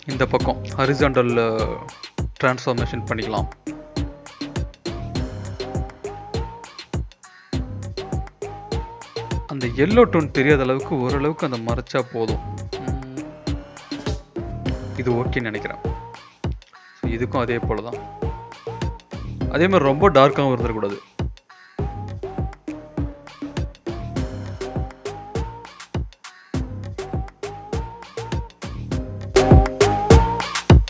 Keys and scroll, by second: 4.3 ctrl+t, 11.6 ctrl+b, 14.9 ctrl+z, 18.1 Return, 18.3 ctrl+b, 20.5 Return, 22.0 ctrl+b, 29.5 Return, 30.0 typing.